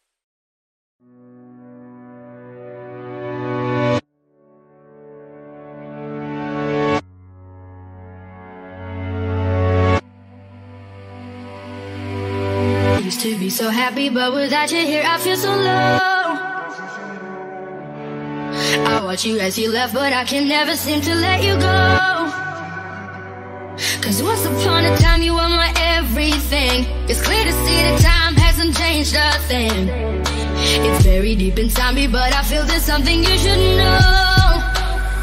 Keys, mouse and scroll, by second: 0.1 right click, 1.7-8.5 drag, 8.7-10.8 drag, 10.8-11.5 typing, 13.3 Return, 15.0 click, 17.0-18.6 scroll up 1, 19.5 click, 23.5 ctrl+d, 26.7-27.2 scroll up 1, 28.8 click, 29.9 right click, 31.3 click, 31.6 right click, 31.7 right click, 32.6 click.